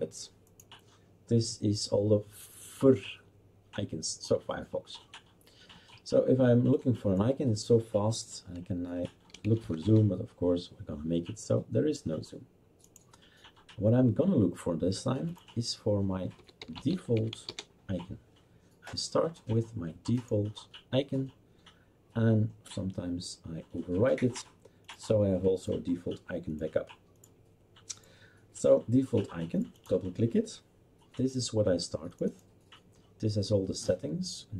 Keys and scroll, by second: 9.1-10.5 typing, 16.3-17.9 typing.